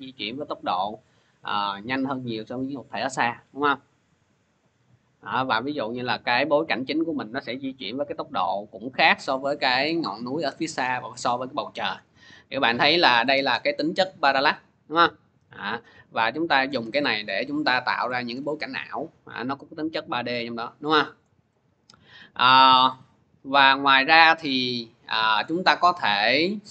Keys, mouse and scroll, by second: 6.4 click, 9.0 click, 14.0 click, 16.5 click, 16.9-17.6 scroll, 17.6-17.9 scroll, 18.2-18.9 scroll, 21.0 click, 22.1 scroll, 24.9 scroll, 25.2 click.